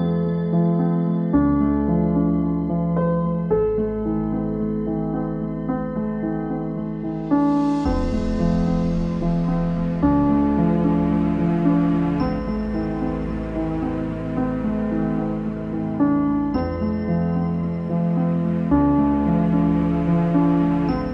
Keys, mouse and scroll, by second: 0.5 s, 8.2 s, 13.6 click, 14.6 s, 16.8 ctrl+r, 18.9 ctrl+r, 20.2 3.